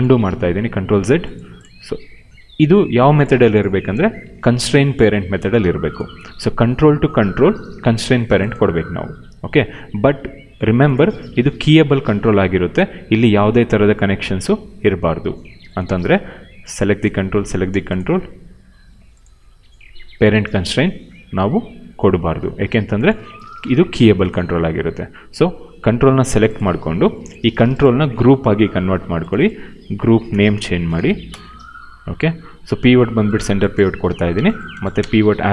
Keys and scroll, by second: 0.2 ctrl+z, 4.3 ctrl+z, 5.5 w, 23.6 q, 26.9 ctrl+c, 28.5 ctrl+g, 29.9 ctrl+v, 30.1-31.4 typing, 34.0 w, 34.6 space.